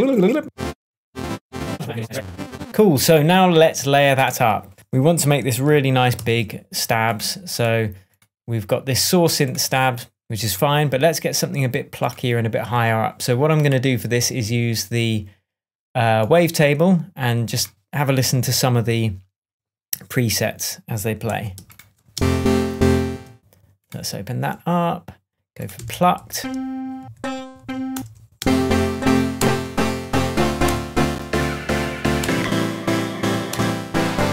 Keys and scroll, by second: 0.8 alt+space, 1.5 Down, 1.6-2.6 typing, 1.7 Down, 6.1 super+d, 22.1 alt+super+space, 25.7 Right, 26.1 Down, 27.5 Up, 27.9 Return, 28.3 space, 28.8 Down, 29.3 Return, 30.4 Down, 30.6 Return, 31.9 Down, 32.2 Return, 33.2 Down, 33.4 Return.